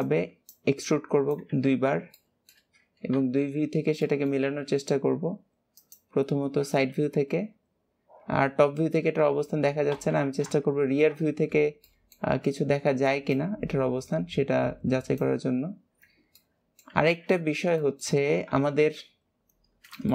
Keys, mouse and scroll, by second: 4.0 shift+middle click, 4.4 e, 9.8 ctrl+KP_3, 11.8-13.2 shift+middle drag, 13.2 click, 16.3 middle click, 17.0 alt+z, 17.3-17.8 scroll down 2, 17.8 shift+middle click, 18.7 KP_7, 19.6-20.0 scroll down 2, 20.0 shift+middle click.